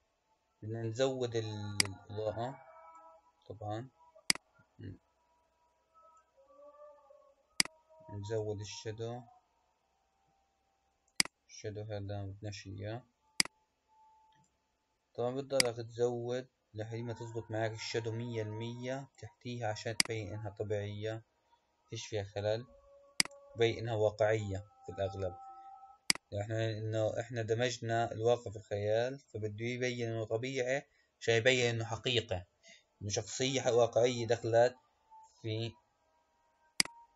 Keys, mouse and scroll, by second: 1.7-7.2 drag, 7.4-10.2 drag, 10.2-11.1 scroll down 3, 11.1 click, 13.2-18.5 drag, 19.9-22.9 drag, 24.1-29.0 drag, 29.6-33.6 scroll down 7.